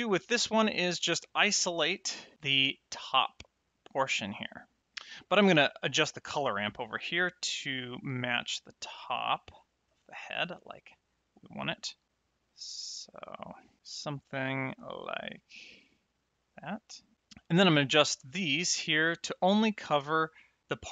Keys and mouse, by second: 0.3 click, 1.4 click, 2.3 click, 6.2 middle click, 7.6 click, 9.8 click, 11.9 click, 12.4 middle click, 13.8 click, 14.4 click, 18.3 click.